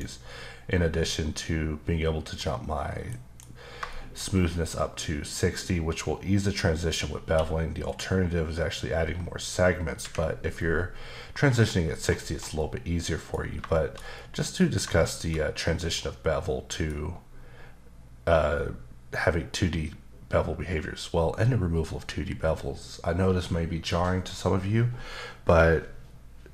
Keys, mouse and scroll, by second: 3.1 ctrl+shift+b, 3.9 shift+middle click, 4.2-6.4 scroll up 1, 7.2 q, 7.8 click, 10.0 Escape, 11.9-12.3 scroll down 1, 12.6 middle click, 13.7 shift+middle click, 14.9 shift+middle click.